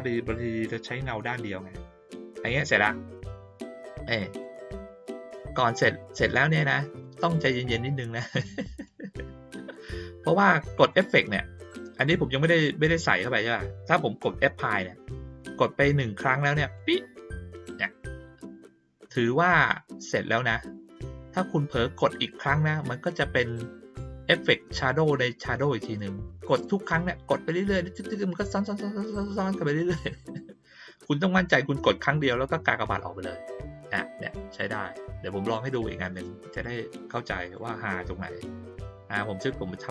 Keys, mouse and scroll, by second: 3.7-4.4 drag, 7.4-8.8 drag, 10.9-11.6 drag, 16.7 click, 32.8 click, 36.5 click, 37.4 click, 39.2-39.9 drag.